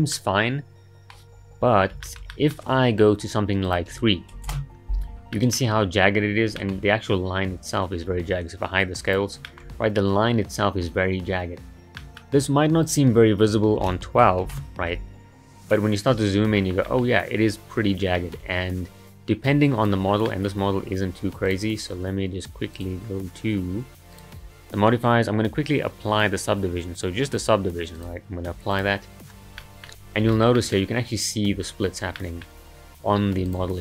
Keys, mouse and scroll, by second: 0.1-3.7 middle drag, 3.7-5.3 drag, 5.3 middle click, 6.2-6.6 scroll down 2, 6.6-8.8 middle drag, 8.8 click, 9.5-12.8 shift+middle drag, 12.8-15.6 drag, 15.6-16.6 scroll up 7, 16.6-17.0 shift+middle drag, 17.0-17.6 scroll up 2, 17.6-18.2 scroll down 10, 18.2-19.5 shift+middle drag, 19.5 click, 20.3-21.5 middle drag, 21.5 click, 22.8 click, 24.1 click, 24.8-25.4 scroll down 2, 25.4-28.0 scroll down 2, 28.0-29.6 drag, 29.6-30.0 middle drag, 30.0-30.3 scroll up 2, 30.3-32.8 shift+middle drag, 32.8-33.5 scroll down 2, 33.5 click.